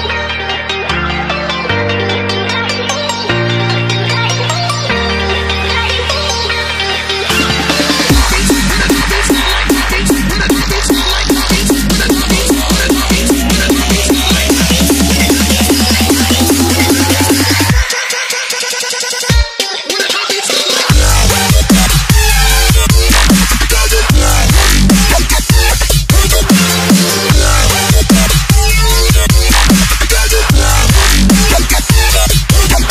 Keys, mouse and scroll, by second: 4.2-4.6 alt+scroll up 2, 4.9 scroll down 1, 5.3-6.4 scroll up 1, 6.4 click, 8.7 ctrl+x, 8.9-9.6 typing, 9.6 click, 9.9 ctrl+v, 11.6 ctrl+t, 12.2 0, 13.0 click, 14.2 0, 15.4-16.0 scroll up 1, 16.0 click, 19.7 Return, 20.6 click, 21.4 Delete, 22.2 click, 31.5-32.5 scroll down 1, 32.5 click.